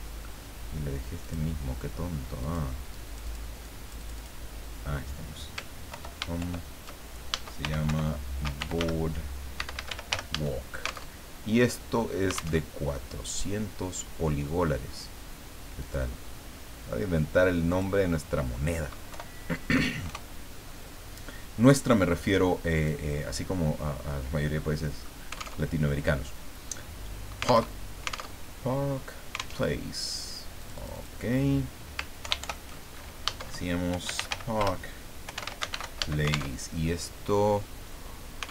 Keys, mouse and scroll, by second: 0.2-0.6 scroll down 2, 1.2 click, 2.4 click, 2.9 click, 3.6 click, 5.9 ctrl+Home, 6.4 ctrl+shift+End, 7.4-10.6 typing, 11.2 alt+Tab, 12.6 alt+Tab, 15.8 click, 17.7 click, 19.1 Delete, 19.7 KP_4, 20.1 KP_0, 22.8 click, 24.1-25.2 middle drag, 25.6 alt+Tab, 27.7 alt+Tab, 29.6 alt+Tab, 30.6 click, 32.2 ctrl+Home, 32.4 ctrl+shift+End, 33.7-36.2 typing, 36.5 alt+Tab.